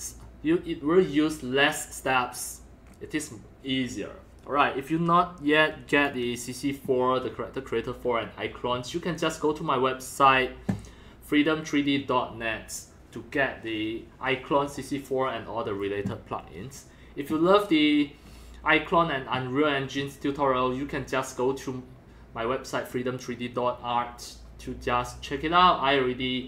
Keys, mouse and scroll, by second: 1.3-2.4 middle drag, 6.0 click, 6.2-11.1 drag.